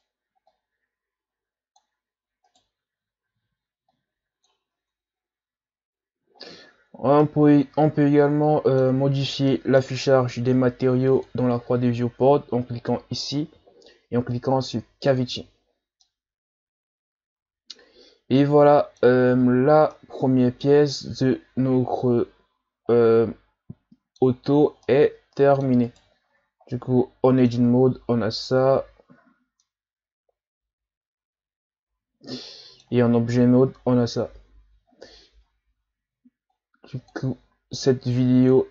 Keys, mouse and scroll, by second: 0.5 click, 2.5 right click, 3.9 click, 4.8 Tab, 5.1-6.0 scroll down 5, 6.4-7.0 scroll down 1, 7.0 scroll down 2, 7.2-11.1 middle drag, 11.1-14.1 drag, 16.1-19.1 middle drag, 19.4-19.9 shift+scroll up 5, 19.9-22.9 middle drag, 24.8-25.9 middle drag, 25.9 right click, 26.3 Tab, 26.7-29.1 middle drag, 29.1 a, 29.6-32.6 middle drag, 33.0 Tab, 33.4-33.9 ctrl+scroll down 1, 34.0-35.3 scroll up 1, 36.6-38.5 drag.